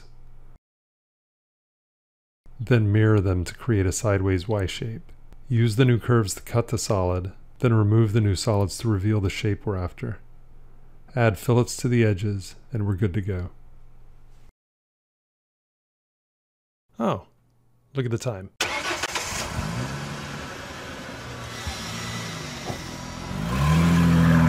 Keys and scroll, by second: 0.7 b, 2.8 alt+x, 5.7 c.